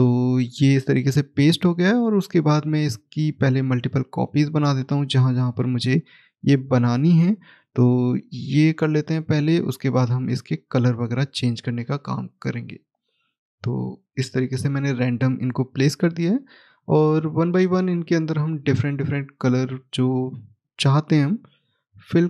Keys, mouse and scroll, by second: 2.1 click, 3.5 right click, 4.1 click, 5.0 right click, 5.7 click, 6.5 right click, 7.2 click, 8.3 right click, 9.3 click, 10.2 right click, 11.3 right click, 11.3 click, 12.5 right click, 13.1 click, 14.2 right click, 16.5 click.